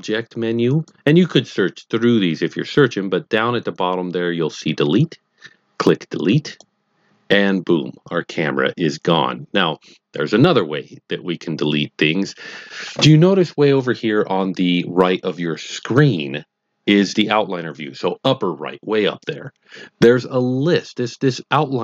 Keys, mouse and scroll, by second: 0.6 click, 6.4 click.